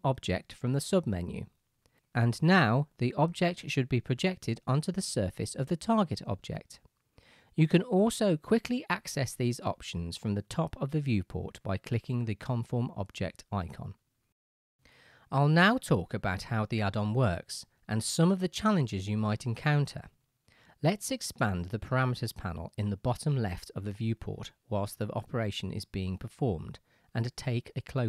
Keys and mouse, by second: 2.5-3.3 right drag, 12.1 click, 23.5-28.0 drag.